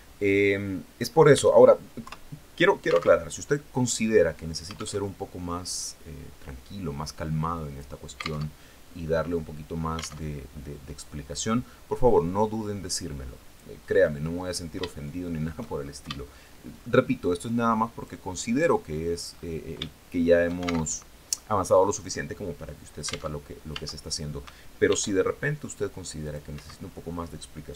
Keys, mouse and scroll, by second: 1.5 KP_3, 2.6 alt+Tab, 4.4 alt+Tab, 5.1-7.4 drag, 7.9 alt+Tab, 9.7 alt+Tab, 10.9-13.2 drag, 13.3 click, 13.4 scroll up 1, 14.3 shift+click, 15.2 shift+scroll up 1, 15.5 shift+middle click, 15.7 shift+scroll up 1, 17.4 click, 18.7-19.0 scroll up 1, 19.3 shift+middle click, 20.3 alt+shift+Tab, 22.8 alt+Tab, 24.3 ctrl+r, 25.0 scroll up 2, 25.6 click, 25.9 Escape, 27.3 s.